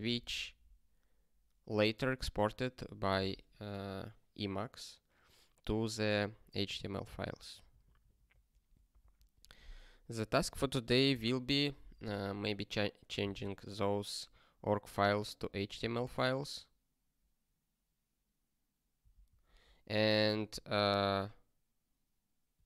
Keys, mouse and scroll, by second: 7.4 ctrl+n, 7.6 ctrl+n, 14.3 Return, 19.0 super+w.